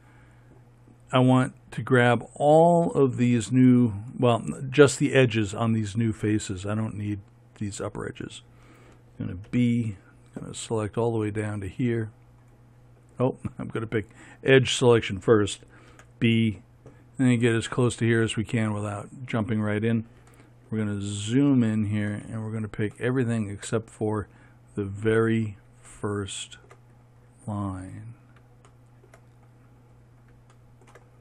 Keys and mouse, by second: 9.9 b, 16.4 b, 21.1 middle click, 22.7-28.3 middle drag, 30.0-31.2 middle drag.